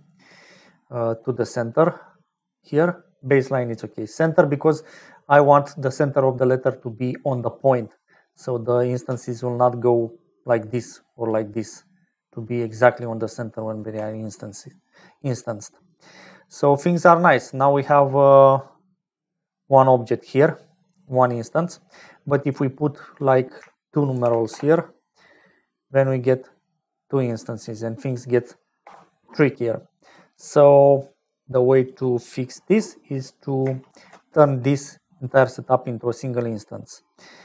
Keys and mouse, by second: 1.5 click, 9.0-14.0 typing, 9.9 click, 12.6 right click, 13.3 right click, 15.4 right click, 16.5 right click, 21.8 click, 22.9-24.4 right drag, 24.4 click, 27.7-30.2 drag, 31.6 click, 32.2 click, 33.8 shift+a.